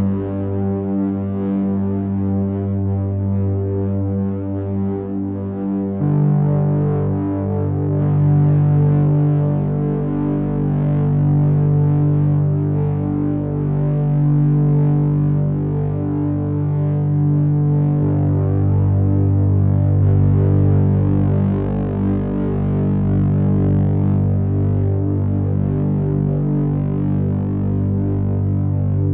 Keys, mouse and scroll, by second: 1.0 KP_1, 3.4 scroll down 1, 3.7 scroll up 2, 3.9-6.4 scroll down 3, 9.2 middle click, 12.6 click, 18.5 middle click, 27.3 click.